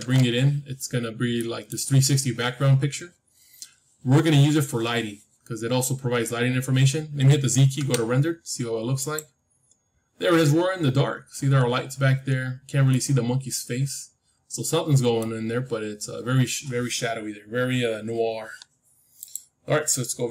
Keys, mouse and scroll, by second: 1.0-1.3 scroll up 1, 1.3-3.3 middle drag, 5.9-6.2 scroll up 1, 6.2-8.3 middle drag, 7.7 z, 8.3-9.5 scroll up 1, 10.3-10.9 scroll up 1, 10.9-14.8 middle drag.